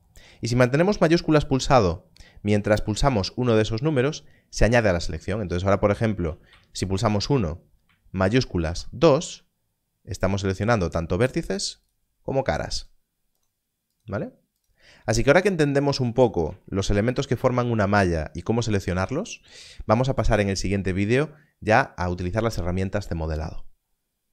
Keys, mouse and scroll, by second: 3.5 shift+2, 8.6 shift+2, 10.2 click, 16.2 alt+a, 16.9 scroll down 1.